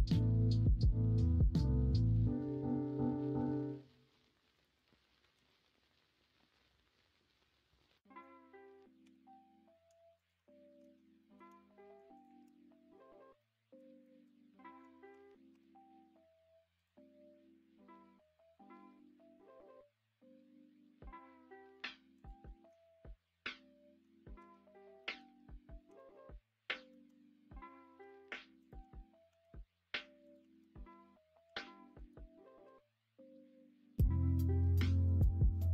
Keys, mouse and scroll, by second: 5.3 ctrl+b, 7.9 middle click, 9.0 2, 10.8 alt+z, 11.2 middle drag, 13.4 middle click, 14.0 middle drag, 15.5 q, 22.5 alt+z, 22.8-24.0 middle drag, 24.3 Tab, 25.0 middle click, 25.8 s, 26.9 ctrl+z, 28.0 ., 29.2 s, 30.5 ctrl+z, 31.5 ,, 35.2 shift+middle click.